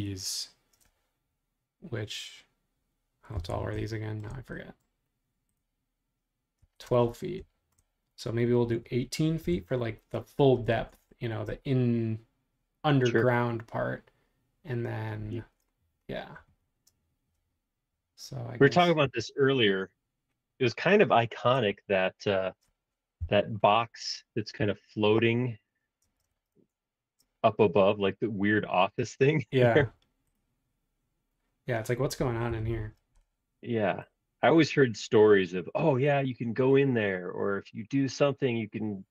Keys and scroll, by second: 3.3 l, 6.6 Escape, 6.9 space, 9.5 l, 10.7 super+Tab, 15.4 super+Tab, 26.0 space, 26.5 super+Tab, 32.5 super+=, 32.6 super+=.